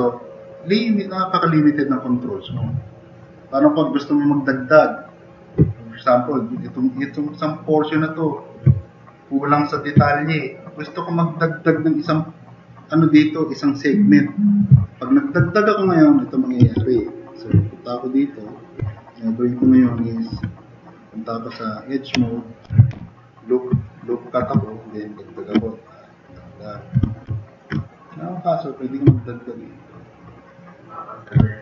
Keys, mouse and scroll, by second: 9.0 middle drag, 9.0 scroll up 2, 14.7 middle click, 20.4 2, 22.4-23.4 typing, 23.8 drag, 25.3 click, 25.7 click, 26.4-26.8 drag, 27.3 drag, 29.2 drag, 30.9 drag.